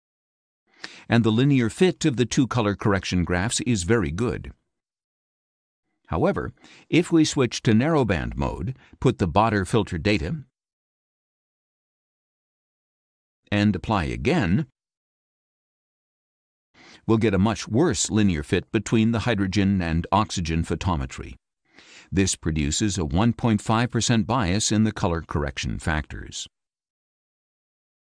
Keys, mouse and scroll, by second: 0.7-2.7 drag, 8.4 click, 9.6 click, 10.9-13.2 typing, 11.8 Tab, 12.8 Tab, 14.8 click, 23.9-26.5 drag.